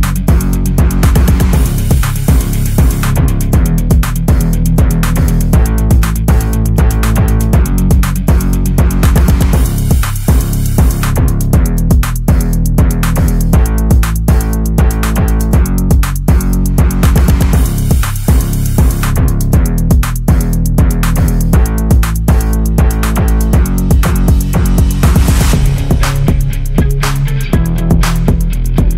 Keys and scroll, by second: 6.8-8.1 Left, 26.7 typing.